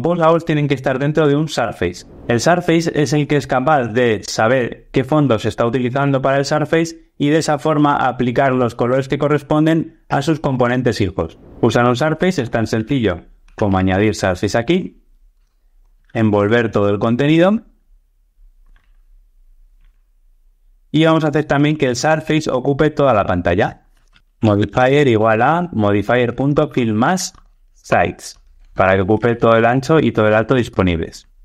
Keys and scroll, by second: 14.6 Return, 18.6 super+x, 19.6 super+x, 19.8 super+v, 26.1 Tab.